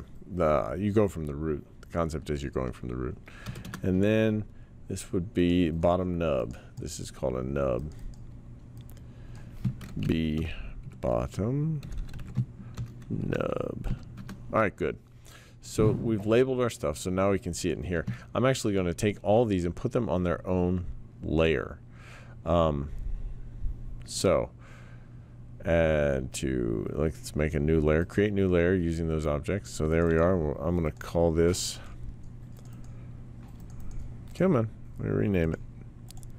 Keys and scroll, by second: 3.4 BackSpace, 3.6 Return, 10.0-14.4 typing.